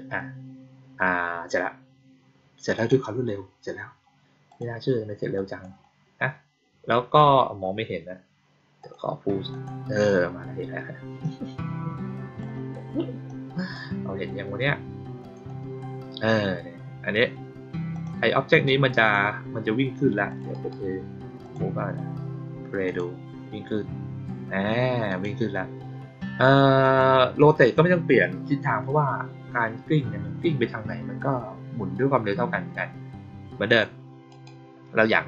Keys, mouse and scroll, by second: 2.7 click, 4.4 click, 5.3 click, 8.7 click, 9.4 click, 11.1-12.3 drag, 13.2-13.6 drag, 15.1 click, 15.4 click, 17.8 click, 18.5-19.0 drag, 20.2 click, 20.4 right click, 21.3 click, 22.8 click, 25.0 click, 26.7 click, 27.5 click, 33.6 click, 34.2 right click.